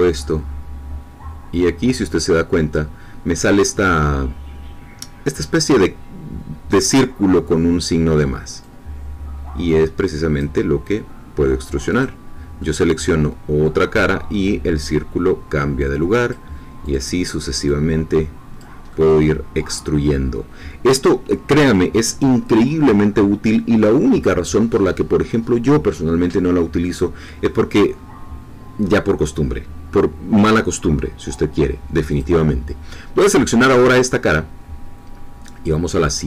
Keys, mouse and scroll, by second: 8.6-10.9 drag, 11.8 click, 12.6-13.8 middle drag, 14.8-16.4 drag, 16.9 click, 17.6 click, 18.9-21.0 middle drag, 25.2-27.9 middle drag, 32.2-33.4 drag, 33.4 middle click.